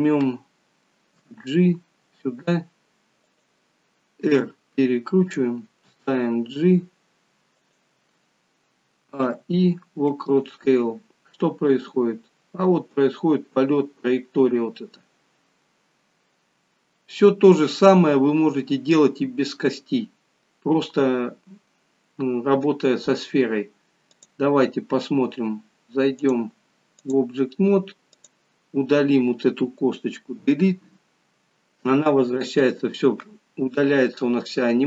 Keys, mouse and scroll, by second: 1.2 g, 9.0 a, 9.2 i, 11.7 click, 24.1 click, 26.2 click, 28.2 click, 30.5 Delete.